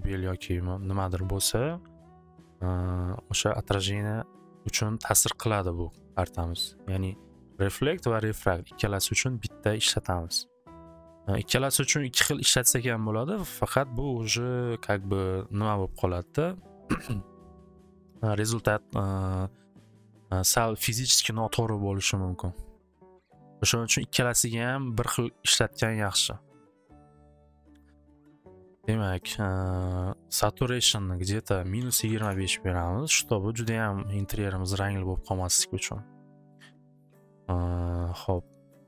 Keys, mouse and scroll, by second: 5.6-9.7 middle drag, 29.2 click, 30.3 click, 30.9 click, 31.2 click, 31.5-32.5 typing, 38.4 click.